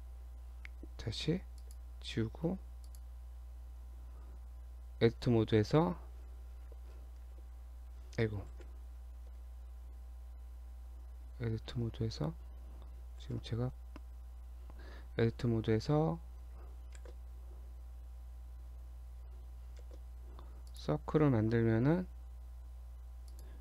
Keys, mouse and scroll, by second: 1.0 x, 2.3 Tab, 2.9 click, 3.8 Tab, 7.2 shift+z, 8.5 ctrl+z, 9.2 Tab, 11.2 Tab, 11.8 Tab, 13.2 shift+z, 16.9 shift+a, 19.8 shift+a, 21.8 s.